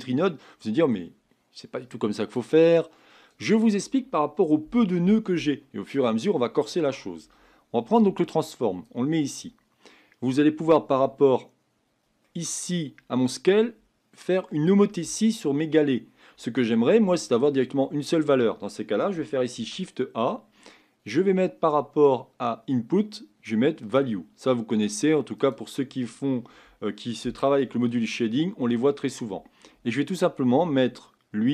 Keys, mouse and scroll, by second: 8.8 click.